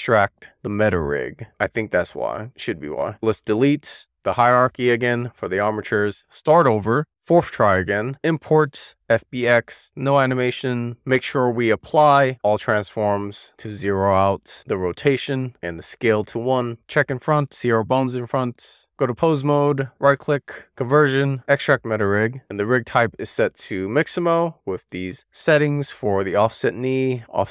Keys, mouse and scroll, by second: 1.1 n, 2.1 shift+middle drag, 2.6 middle click, 3.0 super+z, 4.0 click, 4.4-6.0 right drag, 6.0-7.7 drag, 10.2-10.8 scroll up 2, 10.8 middle click, 11.8 ctrl+a, 17.1 click, 17.3 middle click, 18.7 click, 20.6-25.5 right drag, 25.9-27.5 middle drag.